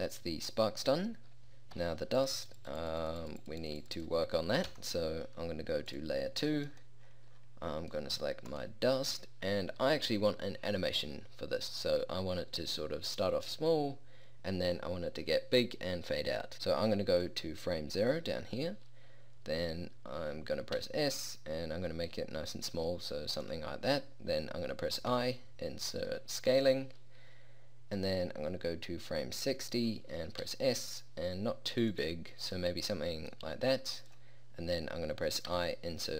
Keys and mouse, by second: 1.9 p, 4.7 p, 10.5-17.3 middle drag, 20.9 s, 25.2 i, 28.1-29.2 drag, 30.5 s, 33.5 s, 35.6 i.